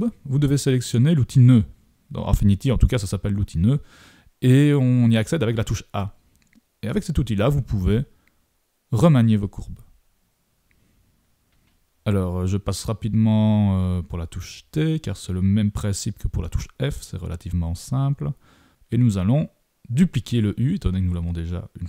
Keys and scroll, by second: 12.8 super+-.